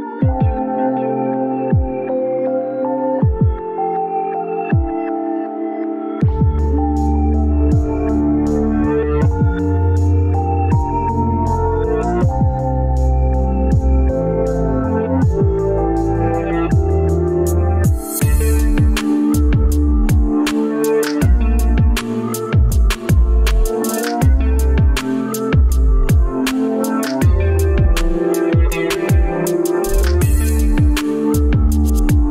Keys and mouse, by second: 9.1-11.8 middle drag, 14.3 middle click, 14.9-18.9 middle drag, 20.5-29.8 middle drag, 31.8-32.3 middle drag.